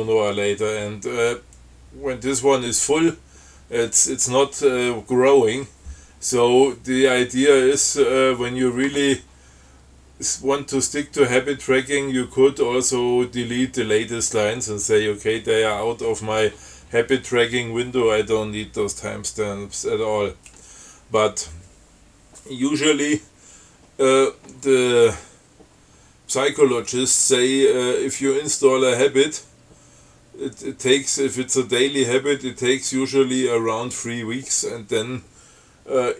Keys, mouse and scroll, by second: 6.8-7.1 scroll down 2, 7.6 scroll up 2, 8.1 scroll down 2.